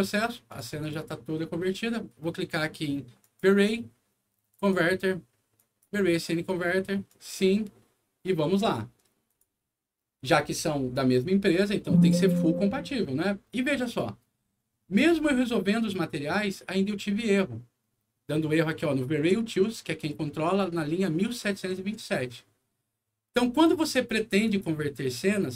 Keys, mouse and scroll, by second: 0.4 click, 0.7 click, 3.1 click, 4.4 click, 5.5 click, 7.0 click, 9.2 click, 24.4 click.